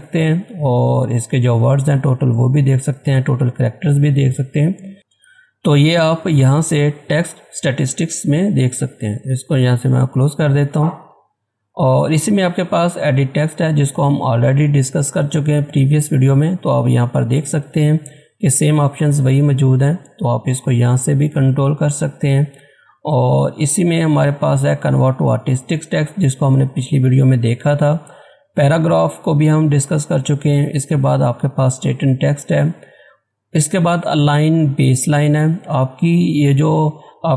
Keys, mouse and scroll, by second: 9.2 click, 13.9 click, 13.9 click, 21.5 click.